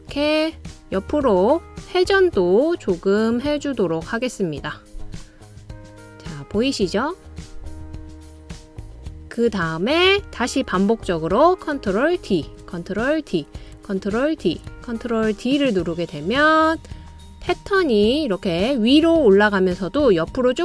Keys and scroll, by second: 12.7 super+d, 13.7 super+d, 14.7 super+d, 15.7 super+d.